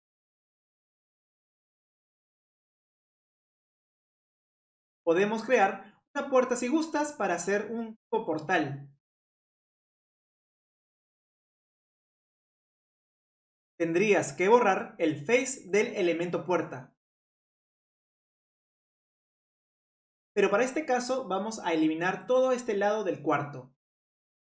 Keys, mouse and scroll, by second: 1.0 click, 1.4 click, 2.5-3.2 middle drag, 3.2 click, 3.7-4.1 middle drag, 4.1-4.4 scroll up 3, 4.3 Tab, 4.4 middle click, 4.8 click, 6.1 click, 6.8-8.8 scroll up 1, 8.8-13.6 drag, 13.6 middle click, 14.2 click, 17.7 click, 17.8 scroll up 1, 17.8 middle click, 18.8 scroll down 1, 19.0-20.0 middle drag, 20.0 ctrl+z, 20.1 ctrl+z, 24.0 scroll up 1, 24.1-24.5 middle drag.